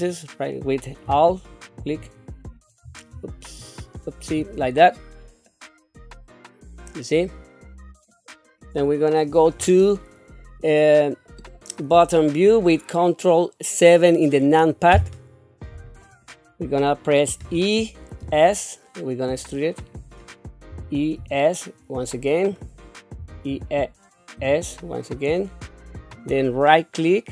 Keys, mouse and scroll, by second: 1.8 alt+click, 3.6 alt+click, 5.5-8.1 middle drag, 14.9 ctrl+KP_7, 16.1-17.4 scroll down 1, 17.4 e, 21.2 e, 23.2 e.